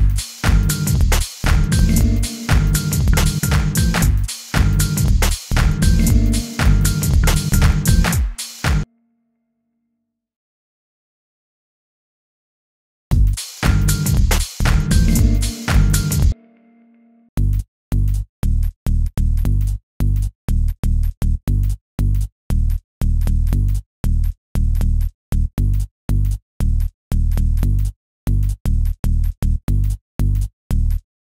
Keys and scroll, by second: 0.9 t, 3.0 t, 4.0 u, 5.0 t, 6.0 u, 7.1 t, 11.5 super+r, 11.9-12.8 typing, 14.7 super+r, 14.9-15.8 typing, 20.2 super+a, 20.5 super+u, 30.4 Left.